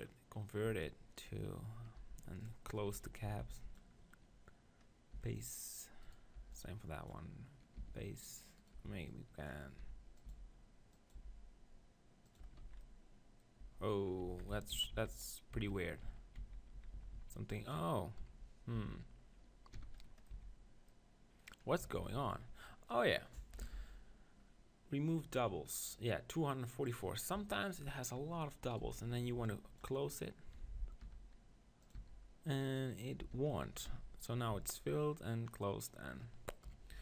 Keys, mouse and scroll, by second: 0.7 Tab, 1.2-2.9 right drag, 2.0 b, 2.9 z, 3.3 b, 5.1 f, 6.0-7.9 right drag, 6.4 b, 7.9 f, 8.7-10.5 right drag, 8.8 b, 9.9 e, 10.3 s, 11.2 g, 12.4 click, 12.5 Tab, 12.6 z, 13.6 Tab, 14.3-14.9 ctrl+z, 15.6 ctrl+z, 16.1 ctrl+z, 16.4 ctrl+z, 16.7 ctrl+z, 18.2 KP_1, 18.7 z, 19.7 f, 20.0 middle click, 20.3 z, 22.1 ctrl+z, 23.7 ctrl+l, 25.1-26.9 drag, 27.3 KP_1, 28.7-30.5 right drag, 28.8 z, 29.2 b, 31.0 e, 31.9-34.4 right drag, 32.0 s, 33.2 f, 33.9 z, 34.6 Tab, 36.7 KP_1, 36.9 Tab.